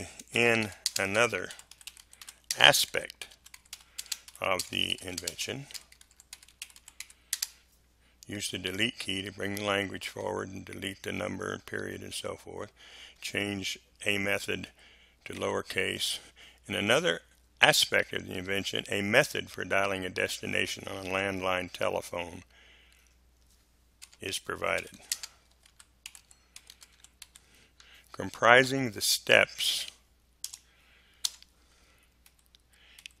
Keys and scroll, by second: 0.1-7.3 typing, 8.6 Delete, 14.6 Delete, 15.3 a, 24.0-27.7 typing, 30.4 BackSpace, 31.2 space, 32.2 Delete.